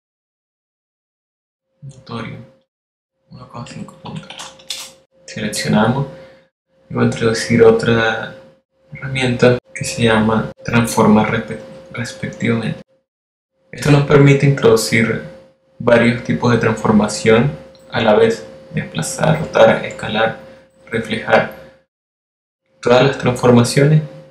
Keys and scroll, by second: 0.9 super+z, 1.3 super+x, 2.2 x, 7.5 5, 7.9 Return.